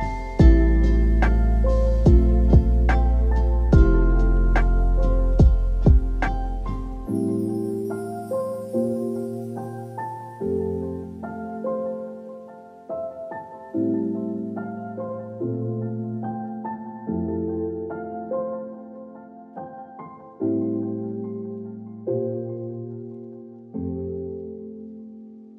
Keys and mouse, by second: 1.0 click, 1.6-2.2 drag, 2.8 click, 4.7 click, 6.5-8.6 drag, 9.3 a, 9.4 a, 9.7-10.7 middle drag, 11.7-12.8 drag, 13.3-14.9 middle drag, 15.4 click, 15.7 middle click, 16.5 click, 17.9 middle click, 18.8 middle click, 19.7 click, 22.2 click, 23.0-24.3 drag, 24.7 click.